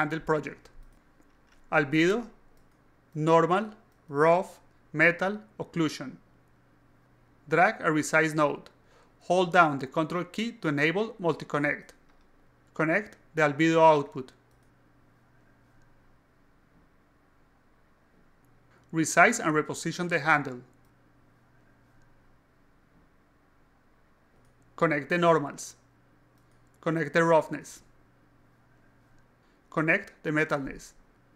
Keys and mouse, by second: 3.0 click, 3.8 click, 4.0 click, 4.6 click, 4.8 click, 5.5 click, 5.7 click, 6.6 click, 6.7 click, 7.4 click, 8.4 click, 10.0 click, 12.8 click, 14.1 click, 14.9-15.3 drag, 15.7 click, 16.3 alt+click, 17.0 click, 18.1 alt+click, 20.2-21.3 drag, 21.7-23.2 drag, 23.4 alt+click, 24.4 click, 26.1-26.5 alt+drag, 27.1 click, 27.9 click, 29.8 click, 30.8 click.